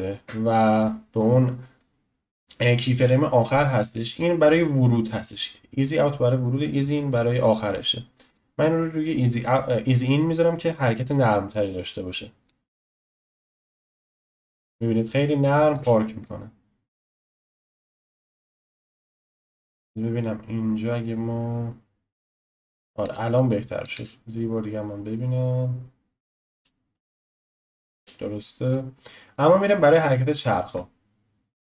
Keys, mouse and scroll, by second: 11.5-12.8 drag, 13.1 space, 15.7 space, 17.0-17.8 drag, 18.1-18.8 drag, 19.1 space, 23.0 space, 23.4 click, 23.9 space, 27.9 space, 28.7-31.6 drag.